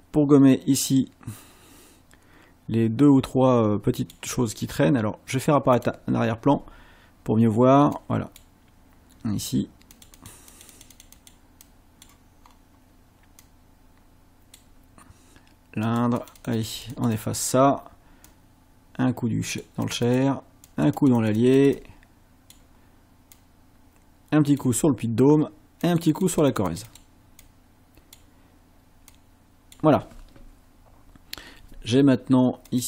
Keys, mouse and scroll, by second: 0.4-4.3 drag, 5.8 click, 8.0 click, 10.0 click, 10.5 click, 11.7 click, 12.5 scroll up 1, 13.5-14.8 drag, 15.9 click, 18.3-19.8 drag, 19.9 click, 20.7-22.7 drag, 23.4-24.8 drag, 25.9-27.2 drag, 27.5 click, 29.2 click, 32.7 click.